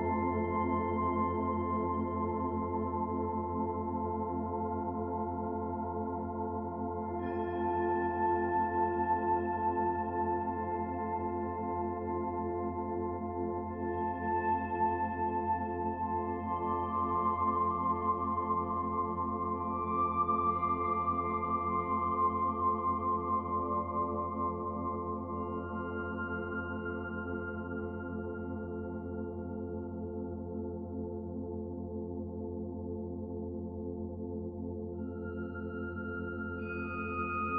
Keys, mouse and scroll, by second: 0.5 middle click, 1.5-3.6 scroll up 2, 1.9 middle click, 4.1 click, 4.8 middle click, 9.9 click, 11.7 click, 17.5 middle click, 20.0 click, 26.6 click, 27.2 click, 30.9 click, 32.3 click.